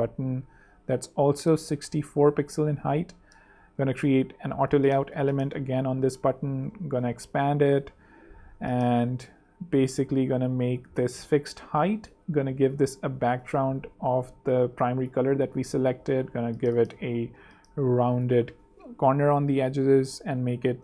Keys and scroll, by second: 3.7 shift+a, 7.4 Down, 9.7 super+Down, 10.0 super+Up, 11.5 Escape, 15.1 5, 15.7 ⌅, 16.3 super+3, 17.4 super+2, 17.9 super+t, 18.5 t, 20.4-20.8 typing.